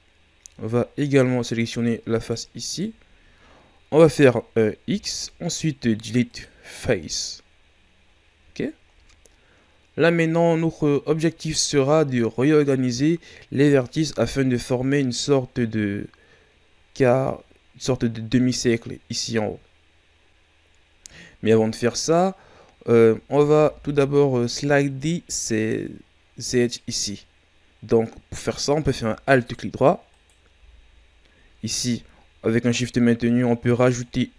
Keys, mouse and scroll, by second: 1.3 shift+right click, 1.7 shift+right click, 2.1 shift+right click, 2.6 shift+right click, 4.8 x, 7.5-9.1 scroll down 2, 9.7 scroll up 2, 23.5 ctrl+Tab, 29.3 alt+right click, 30.1 alt+right click, 32.2-32.6 scroll up 3, 32.6 scroll down 2, 32.7 middle click, 33.4 scroll down 1, 33.6-34.3 middle drag.